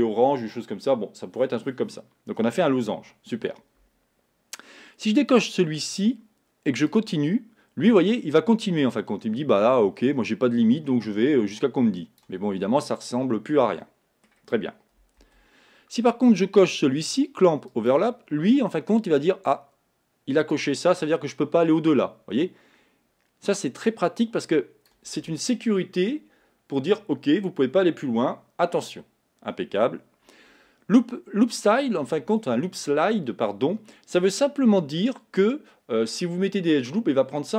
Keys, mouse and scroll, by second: 5.4 click, 6.9-9.9 drag, 12.7-15.0 middle drag, 15.2 z, 17.7 click, 20.5-23.6 drag.